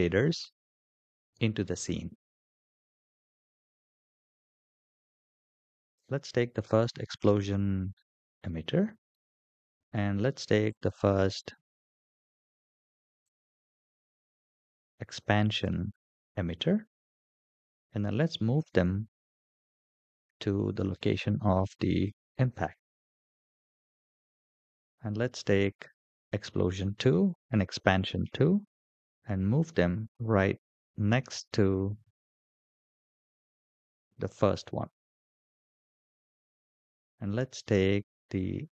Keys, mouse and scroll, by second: 5.7 click, 13.0-14.1 drag, 15.3 ctrl+click, 16.8 scroll up 2, 19.2 g, 26.1 click, 27.0 ctrl+click, 28.9 g.